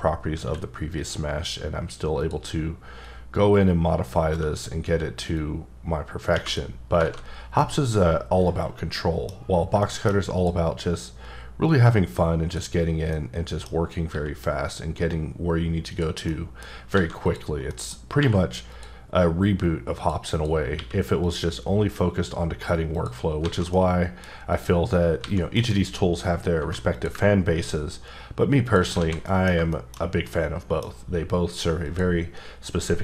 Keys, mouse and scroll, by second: 0.4 q, 0.9 click, 2.2 click, 3.0-4.6 drag, 5.3 click, 6.8-7.6 scroll down 4, 7.0 alt+a, 7.6 middle click, 9.3-9.8 scroll down 2, 9.8 shift+middle click, 10.3 click, 11.7 click, 13.1 middle click, 14.1 x, 16.0 click, 16.6 middle click, 16.7 scroll up 3, 16.9 a, 17.2 click, 17.7 middle click, 17.9 scroll up 3, 18.2 q, 18.7 click, 20.0 click, 20.3 click, 20.7 q, 21.2 click, 22.9 click, 23.2 scroll down 3, 23.4 alt+a, 23.7 middle click, 24.5 click, 25.2 a, 25.6 alt+m, 26.9 click, 27.4-28.4 scroll up 3, 28.7 click, 29.0 a, 29.2 middle click, 30.0 scroll down 2, 30.3 middle click, 31.8 click.